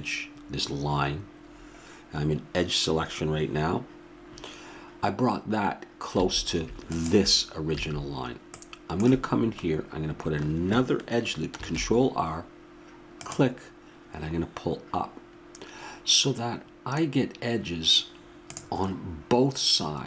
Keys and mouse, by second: 6.1 a, 6.9-8.6 drag, 7.8 a, 8.5 middle drag, 11.6 ctrl+r.